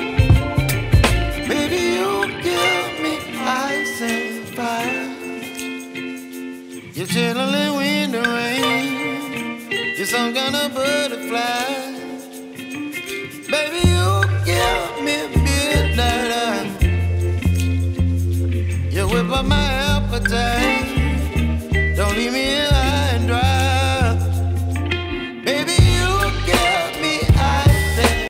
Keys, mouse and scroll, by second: 3.8 v.